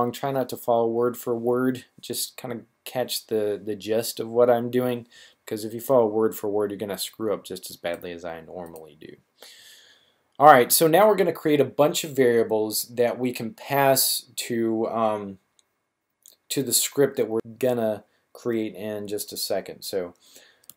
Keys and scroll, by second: 20.5-20.7 typing.